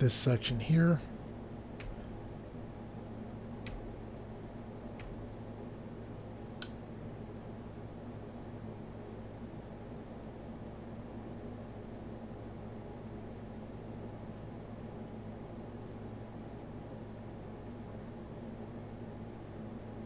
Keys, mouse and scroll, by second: 0.5 i, 1.8 i, 3.7 i, 5.0 i, 6.6 middle click.